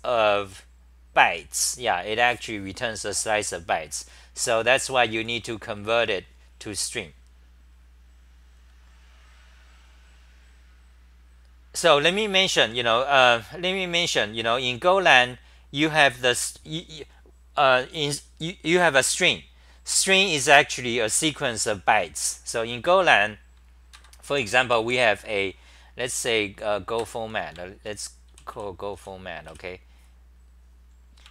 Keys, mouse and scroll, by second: 4.1-6.3 typing, 10.3 1, 24.3 ctrl+g, 24.3 d, 25.2 c, 26.6 a, 27.0 ctrl+g, 28.1-29.5 typing.